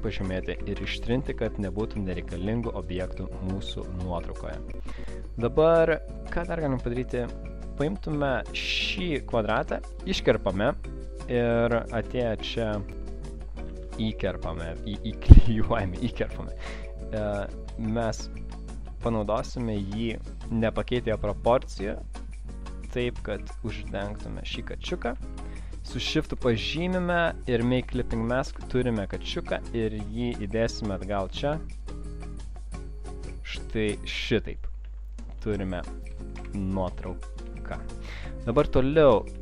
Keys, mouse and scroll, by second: 0.5 Delete, 2.1 alt+scroll down 1, 2.5 space, 3.0 click, 3.1 click, 8.0 click, 9.5 ctrl+x, 11.6 click, 11.6 alt+scroll up 1, 12.0 space, 12.3 click, 12.5 click, 12.8 alt+scroll up 1, 13.6 ctrl+v, 16.2 click, 17.7 click, 19.6 shift+click, 21.0 shift+click, 21.9 shift+click, 22.3 shift+click, 26.2 shift+click, 26.8 double right click, 27.7 click, 28.3 alt+scroll down 1, 28.8 space, 29.1 click, 29.8 click, 32.4 click, 32.8 shift+click, 34.1 shift+click, 34.8 shift+click, 34.8 space, 36.9 Up, 37.8 click, 37.8 space, 38.2 click, 39.1 alt+scroll up 1.